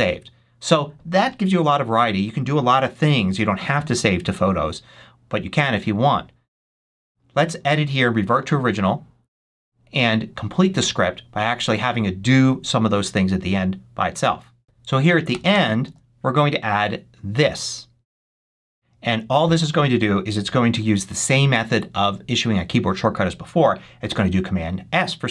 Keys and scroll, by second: 15.2 Return, 15.7 super+v.